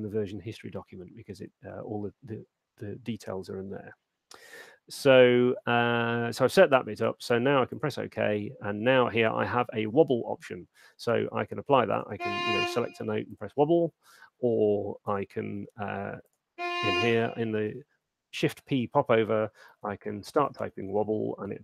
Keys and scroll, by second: 15.4 BackSpace, 17.8 shift+p, 19.5-20.4 typing, 21.5 Return.